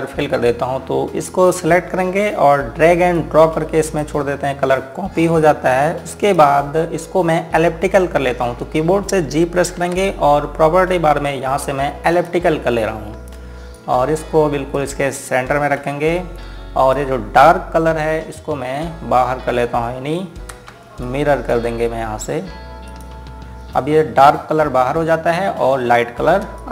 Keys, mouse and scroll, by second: 1.9 click, 6.0-7.0 scroll down 1, 7.0 click, 7.9-10.1 scroll up 1, 10.5 g, 12.9 click, 21.5 shift+Num_Lock, 21.8 click, 23.7 click.